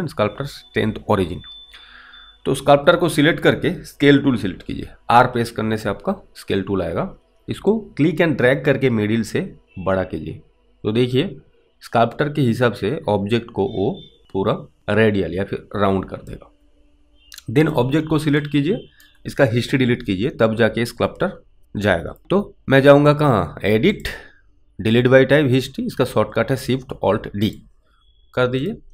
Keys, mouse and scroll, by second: 4.7 r, 8.0 click, 17.7 click, 18.7 alt+right click, 24.0 click, 27.4 click.